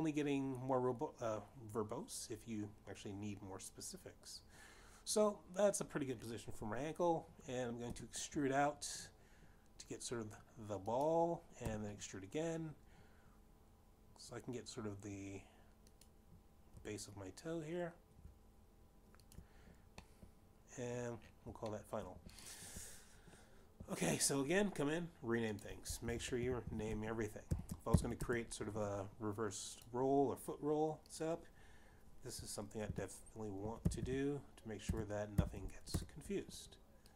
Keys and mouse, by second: 8.5 e, 11.5 click, 12.3 e, 16.2 click, 17.6 e, 20.2 shift+click, 21.0 middle click, 22.6 shift+middle click, 23.2 click, 25.0 click, 26.5 click, 26.6-29.1 typing, 29.1 Return, 30.8 click, 33.1-33.6 typing, 34.7-36.1 typing, 36.5 Return.